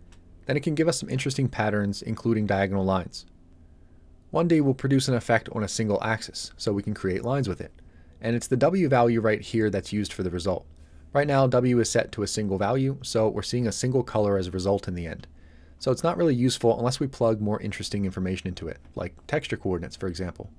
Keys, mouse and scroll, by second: 20.4-20.5 scroll down 1.